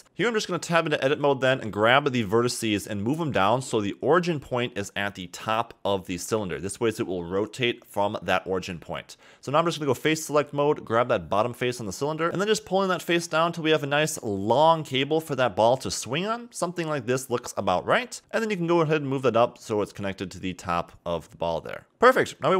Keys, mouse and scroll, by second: 0.0 a, 0.6 click, 0.7-1.2 scroll down 1, 1.2-1.6 scroll up 4, 1.6 a, 1.8 a, 2.6 click, 3.3 Tab, 4.3 g, 6.7 Tab, 7.1 scroll down 2, 7.4-8.1 middle drag, 8.1-8.6 scroll down 3, 8.6 Tab, 8.8 a, 9.0 a, 9.7-10.7 scroll up 4, 10.7 click, 11.3 middle click, 12.1 click, 12.6-13.2 scroll down 5, 13.2 middle click, 13.7 g, 15.8 scroll down 1, 15.9 middle click, 16.4 g, 17.8 g, 18.6 scroll down 1, 18.6 shift+middle click, 19.0 scroll up 1, 19.1 shift+middle click, 19.1 scroll down 2, 19.5 Tab, 20.2 g.